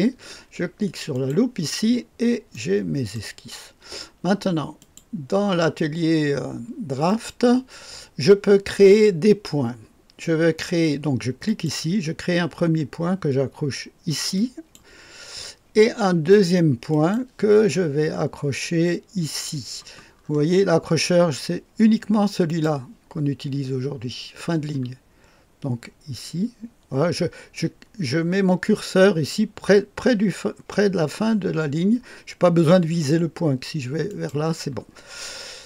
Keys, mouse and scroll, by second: 1.1 click, 2.1-2.5 scroll down 1, 2.5 click, 4.7 click, 7.0 click, 11.4 click, 14.3 click, 16.8 click, 20.2-22.4 scroll up 2, 22.4 click, 34.0 click.